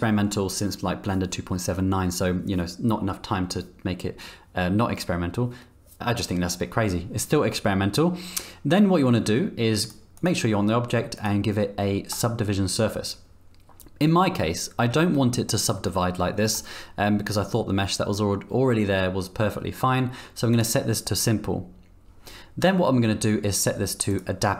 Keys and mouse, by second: 11.2-12.2 drag, 20.5 click, 24.1 click.